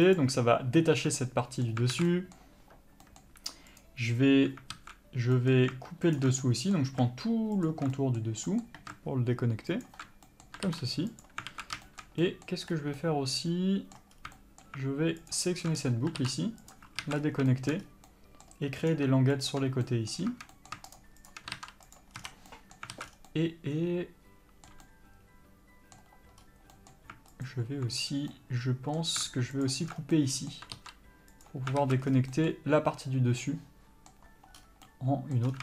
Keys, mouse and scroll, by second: 0.5 ctrl+e, 1.5-4.0 middle drag, 2.2 alt+a, 4.0 click, 5.0 alt+a, 5.6-6.4 middle drag, 6.4 alt+shift+click, 6.7-8.0 middle drag, 8.0 alt+shift+click, 8.2-10.1 middle drag, 10.1 alt+shift+click, 10.6-15.6 middle drag, 11.5 ctrl+e, 11.8 alt+a, 13.0-13.3 scroll up 1, 14.4 scroll up 1, 15.6 alt+shift+click, 16.1 scroll down 1, 17.0 ctrl+e, 17.3 alt+a, 17.5-17.8 scroll up 1, 17.8-19.1 shift+middle drag, 18.1 scroll up 1, 19.1-19.7 drag, 20.1-21.3 middle drag, 21.3 shift+click, 22.3 ctrl+e, 22.4 scroll down 1, 22.6 a, 22.8-27.8 middle drag, 23.2 alt+a, 23.4 scroll down 1, 26.7 scroll up 1, 27.8 alt+click, 28.6-30.0 middle drag, 30.0 alt+shift+click, 30.2 alt+scroll down 2, 30.4-35.6 middle drag, 30.9 scroll up 1, 31.7 ctrl+e, 32.0-32.5 alt+scroll down 2, 32.1 alt+a, 34.9 scroll up 1.